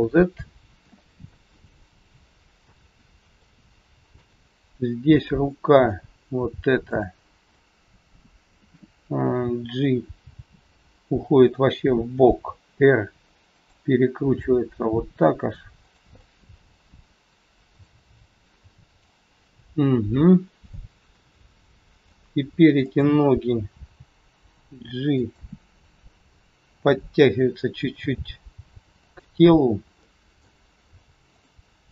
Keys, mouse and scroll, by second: 1.2 middle click, 3.0 scroll down 1, 3.4 shift+middle click, 5.3 middle click, 6.8 click, 7.5 middle click, 10.1 g, 13.5 r, 15.7 g, 16.3 middle click, 19.3-20.5 scroll up 3, 20.7 shift+middle click, 21.1 scroll up 1, 21.2 middle click, 23.6 click, 23.8 g, 26.8 click, 28.0 g, 29.9 middle click, 31.3 click.